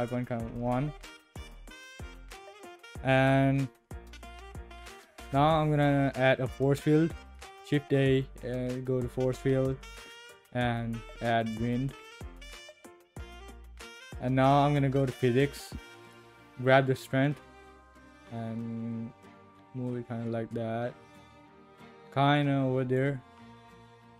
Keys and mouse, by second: 5.3 shift+a, 7.7 shift+a, 14.4 click, 17.2-23.0 drag, 23.8-24.1 drag.